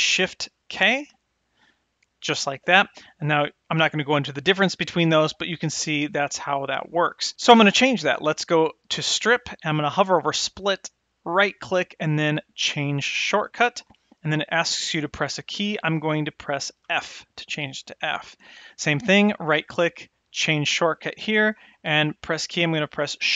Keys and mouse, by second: 1.6 shift+k, 8.9-23.3 drag.